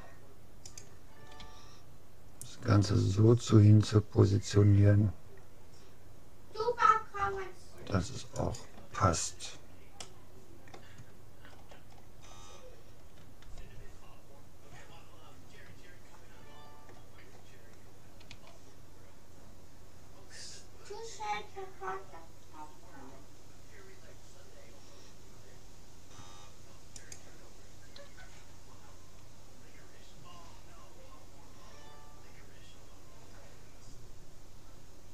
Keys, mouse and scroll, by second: 1.5 g, 9.4-12.9 middle drag, 14.1 middle click, 14.7-15.9 middle drag, 16.1 click, 18.3 s, 28.2 g.